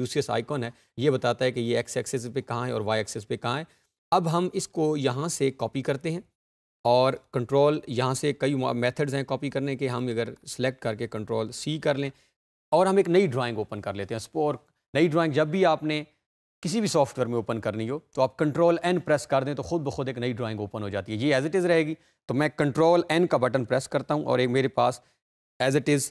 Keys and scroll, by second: 11.1 ctrl+c, 18.1 ctrl+n, 23.6 ctrl+n.